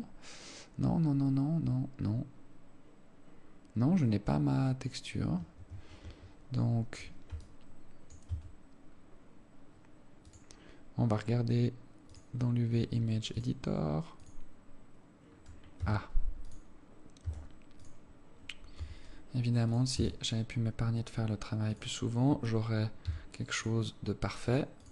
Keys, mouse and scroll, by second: 6.5 Escape, 7.8 alt+click, 8.7 Tab, 9.3-9.7 scroll up 4, 10.7 scroll up 1, 12.4 click.